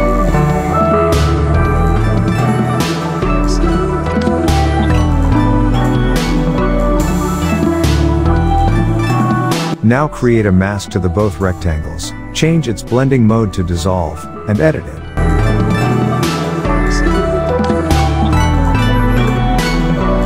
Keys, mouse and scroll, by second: 3.3 click, 4.9 space, 4.9-5.4 click, 5.2 space, 6.1 click, 12.4-13.3 alt+right click, 13.3 space, 13.4-13.9 click, 13.7 space, 14.8 click, 18.1-18.5 drag, 19.3-19.8 alt+right drag.